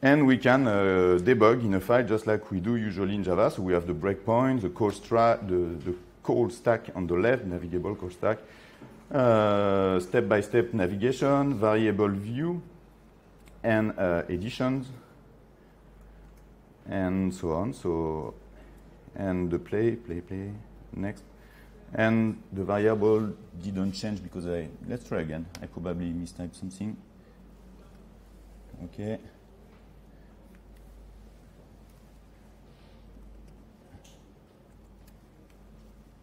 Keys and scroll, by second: 9.6 F6, 20.9 F8, 32.0 F6.